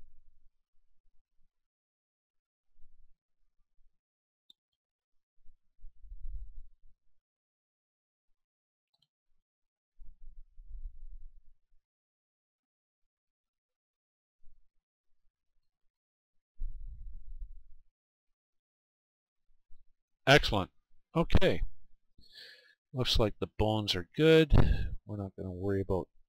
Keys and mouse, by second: 3.6 right click, 4.3 middle click, 4.8-9.3 right drag, 9.6-18.0 right drag, 19.1-20.8 right drag, 20.8-22.9 middle drag, 25.4-26.2 middle drag.